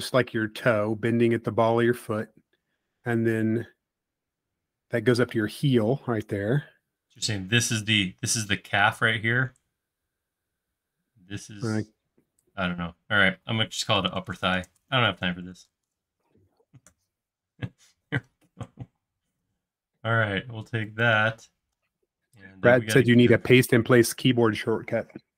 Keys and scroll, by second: 13.8-16.1 typing, 16.9 Return, 19.0 m.